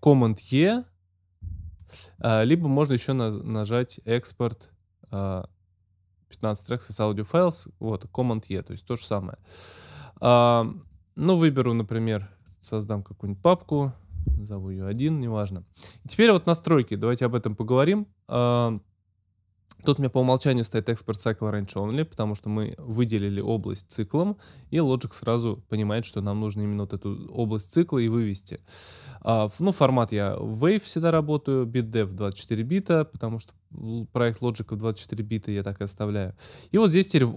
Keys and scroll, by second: 14.2 l.